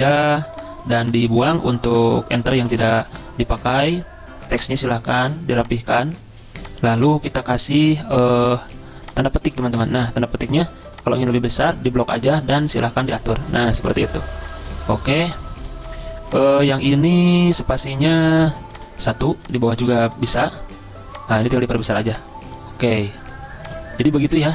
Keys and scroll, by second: 1.9 BackSpace, 2.2 BackSpace, 2.5 Delete, 2.7 Delete, 3.1 Delete.